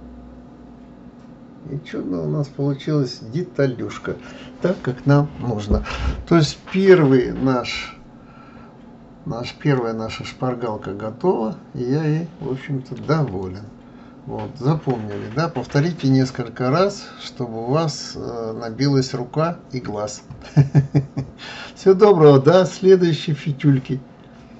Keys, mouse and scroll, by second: 0.0-1.5 middle drag, 8.3 scroll up 2, 8.9 scroll down 1, 9.8-12.8 middle drag, 13.4-16.3 shift+middle drag, 16.3-16.6 scroll up 2, 17.1 scroll down 1, 17.9-19.0 scroll up 3, 19.0-21.0 scroll down 1.